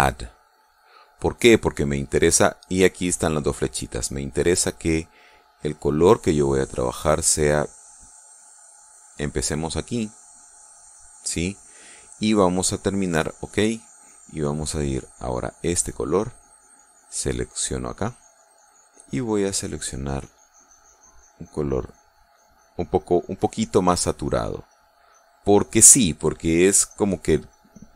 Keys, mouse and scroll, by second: 0.8 click, 4.6 click, 8.1 click, 9.4 click, 14.0 click, 15.5 click, 18.0 click, 19.9 click, 21.9-23.5 drag, 23.7-24.9 drag, 25.1 click, 27.2 click.